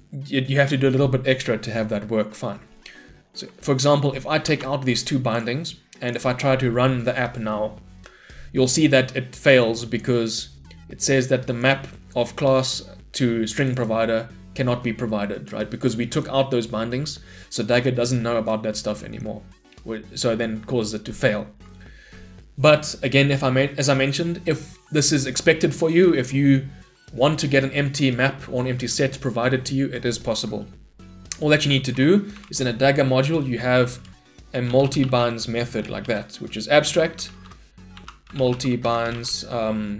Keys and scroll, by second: 4.5 ctrl+/, 6.3 shift+F10, 18.8 shift+Escape, 36.0 Return.